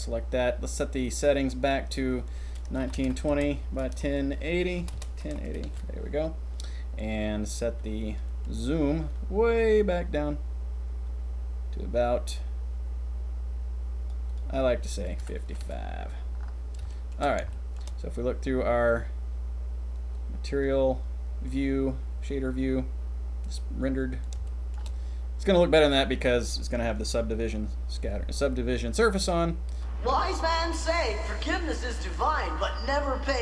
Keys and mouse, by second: 1.9-4.9 drag, 4.9 BackSpace, 9.1-10.4 middle drag, 15.4 KP_5, 16.8 shift+middle drag, 17.4-17.7 shift+middle drag, 24.0 middle click, 24.4 shift+middle drag, 29.1 click, 29.7 click.